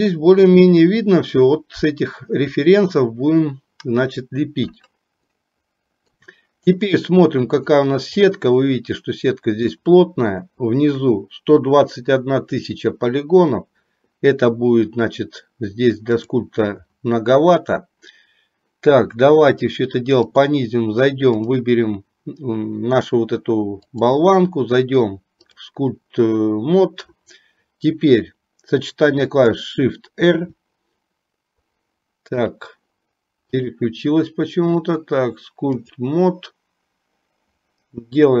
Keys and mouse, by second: 5.4 shift+middle click, 9.9 shift+middle click, 20.4 click, 24.1-25.9 drag, 30.4 shift+r, 32.4 click, 33.9-36.2 drag.